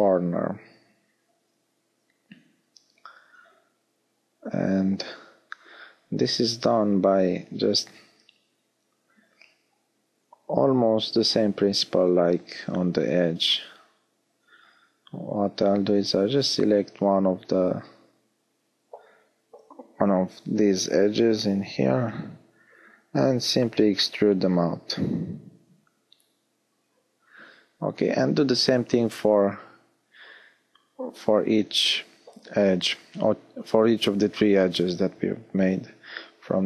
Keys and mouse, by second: 13.0 b, 14.5 b, 15.8 b, 20.8 e, 21.0-24.3 middle drag, 27.9 click, 34.0 middle click, 34.6-36.6 middle drag.